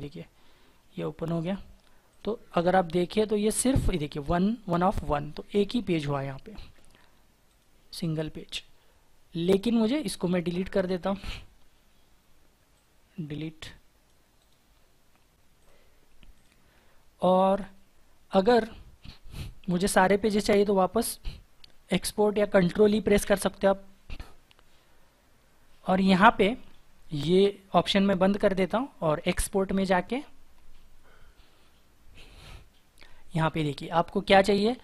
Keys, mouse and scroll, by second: 5.7 scroll down 1, 12.8 right click, 23.1 ctrl+e.